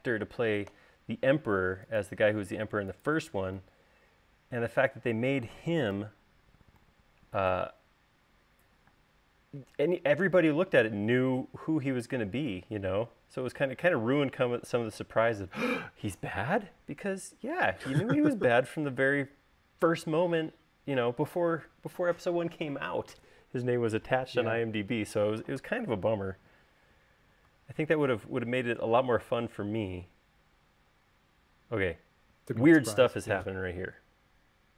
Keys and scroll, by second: 6.2 u, 9.2 space.